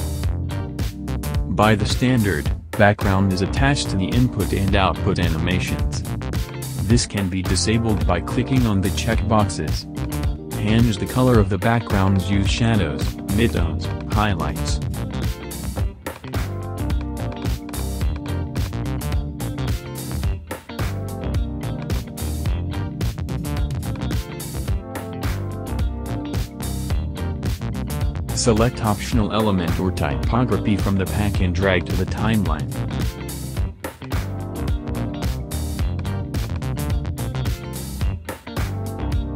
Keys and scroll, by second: 3.3 space, 37.4 space.